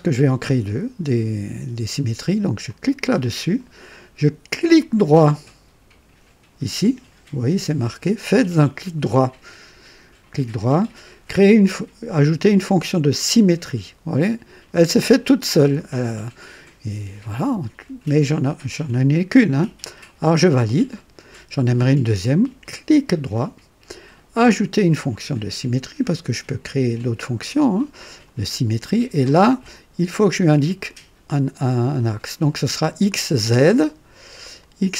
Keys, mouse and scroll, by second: 2.6 click, 9.7 right click, 13.3 click, 20.6 click, 22.9 right click, 28.2 click, 34.6 click.